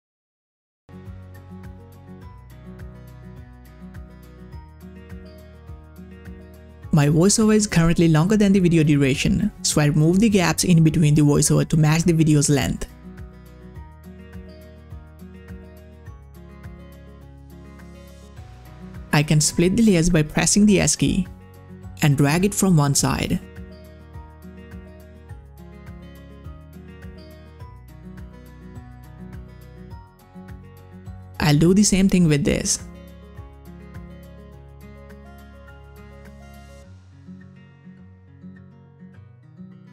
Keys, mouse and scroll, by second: 13.6 click, 16.7 scroll down 1, 17.6 click, 19.8 click, 20.2 s, 22.5 s, 22.5-30.8 drag, 31.4 s, 32.8-39.9 drag.